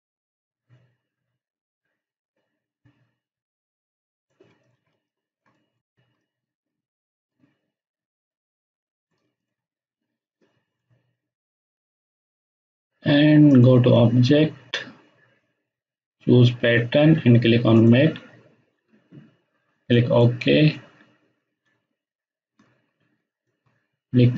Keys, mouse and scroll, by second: 4.8 space, 5.0-5.8 ctrl+drag, 17.7 click, 21.7 space, 23.4-24.3 ctrl+alt+drag.